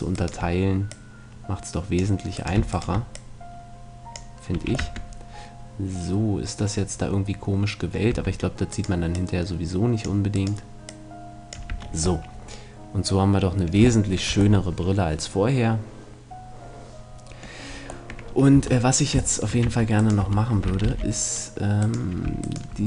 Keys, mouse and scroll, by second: 0.9 click, 2.1 click, 2.8 right click, 4.6 a, 4.7 click, 4.8 Tab, 5.0-6.0 middle drag, 8.1 Tab, 8.7-10.9 right drag, 9.2-10.9 drag, 11.7 Tab, 11.8-13.4 middle drag, 16.0 middle click, 18.1-19.4 middle drag, 18.6 Tab, 19.6 Tab, 20.0-21.8 right drag, 20.2 Tab, 20.8 ctrl+r, 22.0-22.8 right drag.